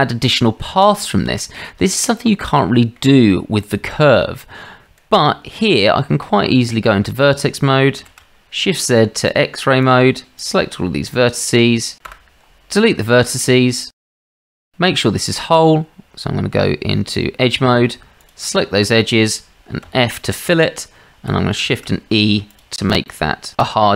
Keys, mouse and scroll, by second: 2.6-3.0 shift+middle drag, 3.9-4.4 shift+middle drag, 5.8 Tab, 8.0 shift+z, 9.5-9.8 drag, 12.1 Delete, 13.5 Tab, 14.1 shift+z, 14.8 shift+z, 15.4 Tab, 19.9 f, 21.6 shift+e.